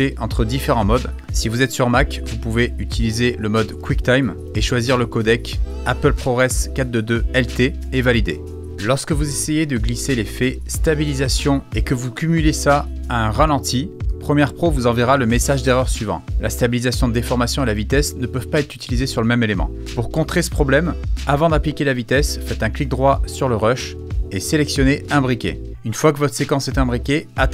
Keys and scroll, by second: 21.1 super+z.